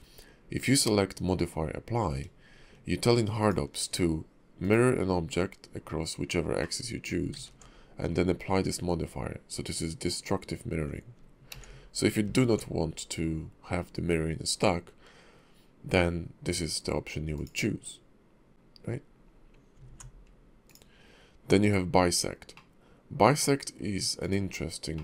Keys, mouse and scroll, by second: 0.6 click, 3.4 shift+click, 6.6 middle click, 7.3 ctrl+`, 11.5 ctrl+z, 12.2 ctrl+z, 17.3 click, 19.8 alt+x, 20.6 click, 22.5 middle click, 24.2 click, 24.9 middle click.